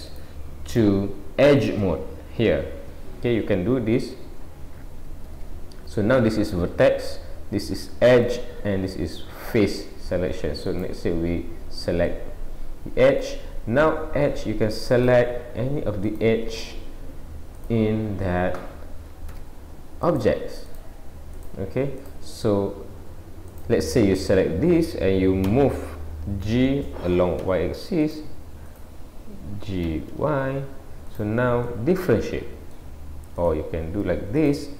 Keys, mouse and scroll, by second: 0.1 click, 19.4 click, 20.0 click, 20.7 click, 21.4 click, 22.0 click, 23.5 click, 25.4 g, 28.7 click, 29.9 g, 31.7 middle click, 33.4 click, 34.4 shift+click.